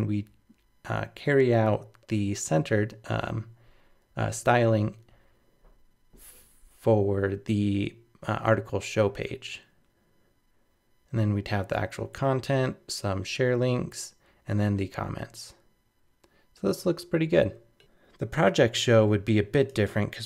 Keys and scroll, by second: 17.8 super+-.